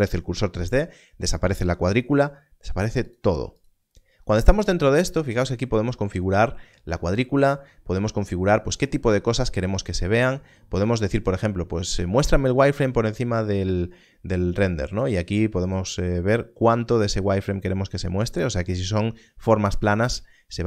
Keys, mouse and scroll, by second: 3.0 click, 10.8 click, 14.9 click.